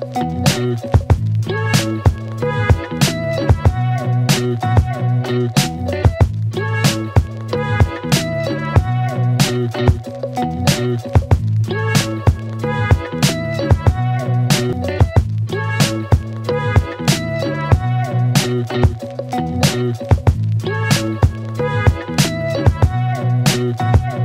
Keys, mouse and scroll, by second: 3.5 click, 5.3-7.1 alt+click, 11.1 p, 12.3-14.0 click, 19.6 click, 22.1 click.